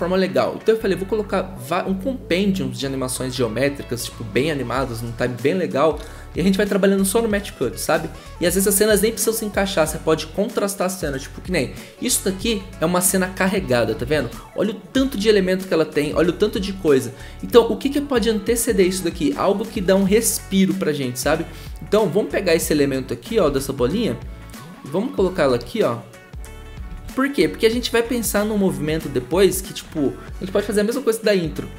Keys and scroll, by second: 14.1 ctrl+z, 16.0 b, 23.4 ctrl+z, 26.9 ctrl+z.